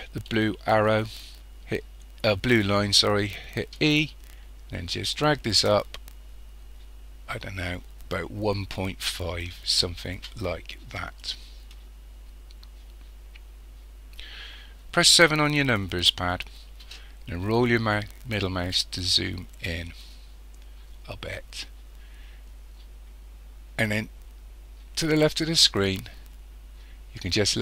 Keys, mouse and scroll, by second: 3.8 e, 11.2 click, 15.2 KP_7, 17.3 scroll up 2, 20.3 scroll down 1.